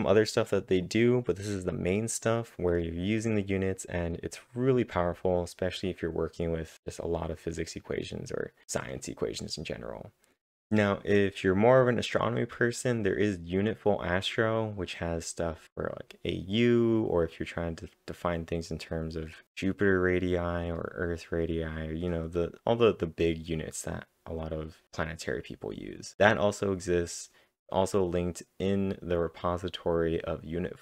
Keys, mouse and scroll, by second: 0.0 scroll up 5.